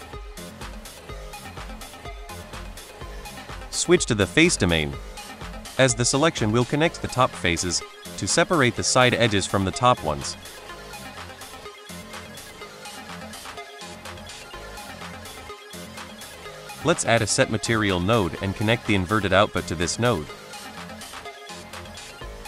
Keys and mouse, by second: 1.6 click, 2.0-2.8 drag, 3.1 middle click, 3.6-4.6 drag, 5.7-7.1 drag, 8.8 shift+middle click, 10.0 shift+middle drag, 12.2 middle click, 13.5 middle drag, 14.3 middle drag, 15.1 shift+a, 19.0 click, 19.4 middle drag, 20.2 middle click, 21.1-22.0 right drag, 22.3 middle drag.